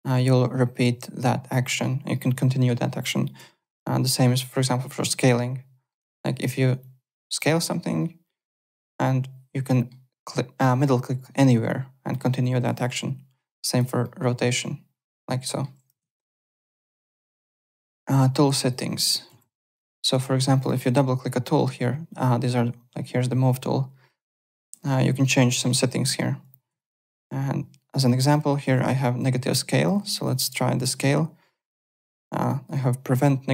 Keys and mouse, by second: 2.1 middle click, 3.4 r, 4.1 click, 4.8 middle click, 6.8 click, 8.3 middle click, 10.8 middle click, 12.9 e, 13.5 click, 14.0 middle click, 16.0 alt+Tab, 16.5 alt+click, 18.7 click, 19.3 w, 20.5 click, 24.4 click, 26.7 alt+Tab, 28.2 click, 30.2 click, 31.9 click, 32.4 alt+click.